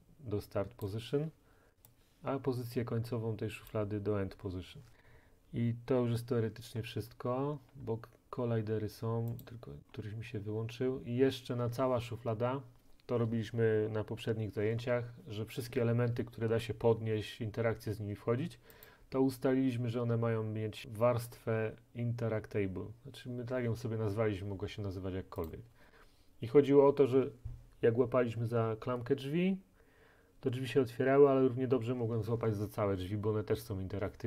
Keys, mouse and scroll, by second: 0.9 click, 3.7 click, 6.7-7.3 scroll, 7.8-8.3 scroll, 9.4 click, 10.0-11.0 scroll, 15.0 middle click, 18.9-20.8 drag, 25.5-26.9 drag.